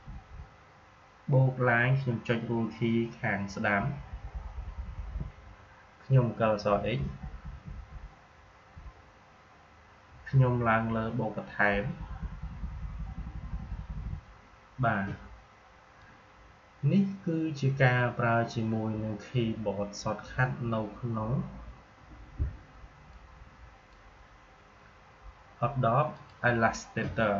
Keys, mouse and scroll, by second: 0.0-0.2 typing, 3.7 Right, 6.6-8.6 typing, 11.6 Up, 23.0-26.0 drag.